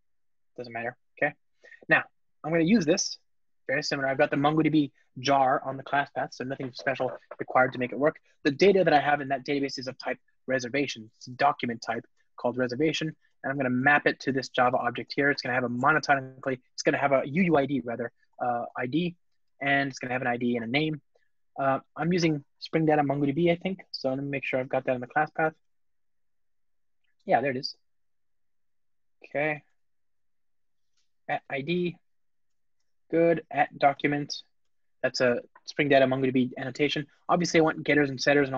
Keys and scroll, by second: 9.8 Return, 14.2 Return, 24.6 shift+super+o, 27.5 shift+super+o, 29.7 ctrl+Tab, 30.8 Tab.